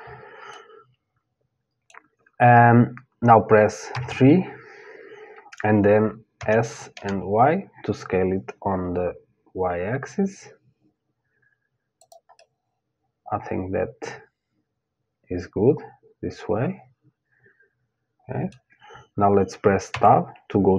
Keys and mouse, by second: 0.1-3.5 middle drag, 3.5 KP_3, 6.0 s, 12.0-14.0 middle drag, 19.5 Tab.